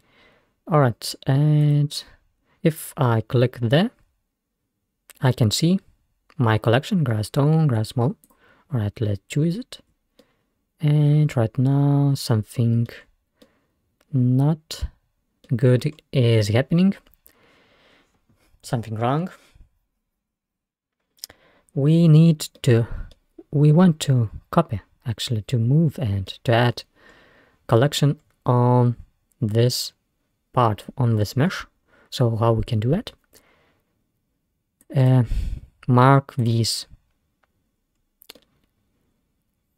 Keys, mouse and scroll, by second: 1.7-4.6 drag, 9.6-10.2 scroll down 4, 10.2-13.0 middle drag, 13.3 scroll down 3, 13.5-15.9 middle drag, 15.9-16.7 scroll up 3, 17.0 scroll down 1, 18.0 scroll down 1, 22.6-25.4 middle drag, 26.3-27.1 middle drag, 27.1 scroll up 2, 28.2-28.7 scroll up 2, 29.4-30.0 scroll up 2, 30.1 scroll down 1, 31.5-32.0 scroll down 1, 32.0 scroll down 2, 32.7-34.9 middle drag, 34.9 click, 36.5 click, 37.7-38.2 scroll up 4, 38.4-39.7 middle drag.